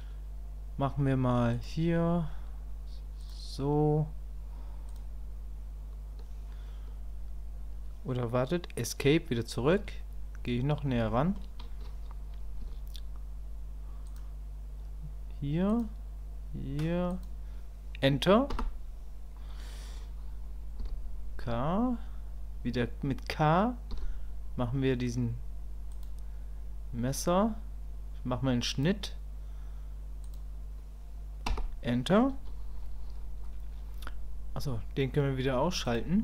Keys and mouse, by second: 11.1 shift+click, 35.9 click.